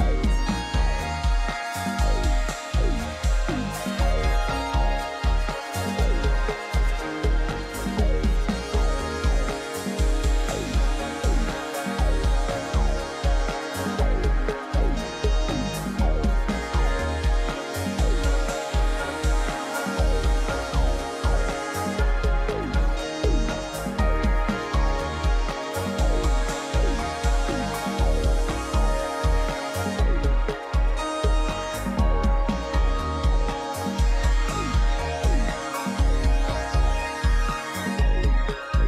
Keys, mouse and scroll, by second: 0.7 Right, 1.3 Right, 1.9 Right, 2.9 Right, 3.8 Right, 4.6 Right, 5.4 Right, 6.2 Right, 7.1 Right, 7.8 right click, 9.0 right click, 9.7 right click, 9.8 click, 38.1 ctrl+=, 38.3 ctrl+=, 38.5 ctrl+=, 38.7 ctrl+=.